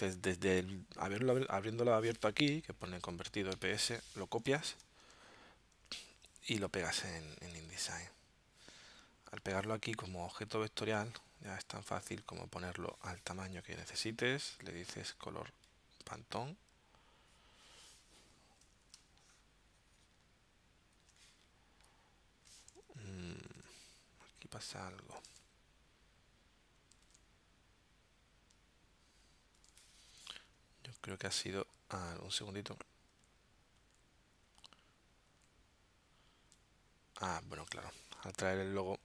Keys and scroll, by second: 2.5 alt+super+0, 4.6 super+c, 5.9 super+Tab, 7.7 super+v, 19.0 space, 23.5 super+Tab, 25.3 super+Tab, 27.0 super+Tab, 29.5 super+Tab, 32.2 super+z, 33.1 super+z, 33.8 super+z, 34.5 super+z, 35.2 super+z, 38.6 shift+super+z.